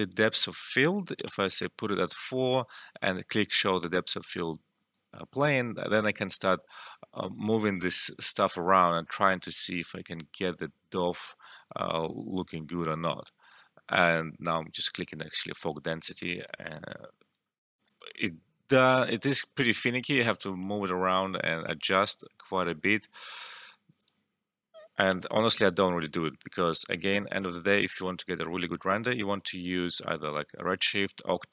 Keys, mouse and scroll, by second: 1.2 4, 1.3 Return, 2.9 click, 6.7-16.9 drag, 17.7 click, 19.0 Return, 23.1 click, 25.0 1, 25.3 Return, 27.7 click.